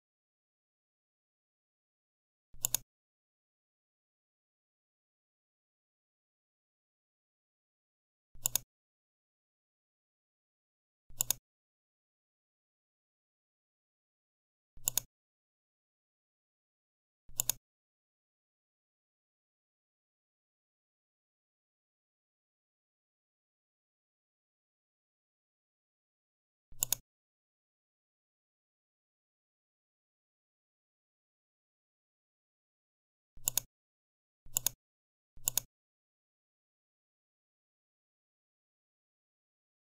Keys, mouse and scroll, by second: 2.6 click, 8.3 click, 11.1 click, 14.7 click, 17.2 click, 25.1 ctrl+z, 26.7 click, 33.3 click.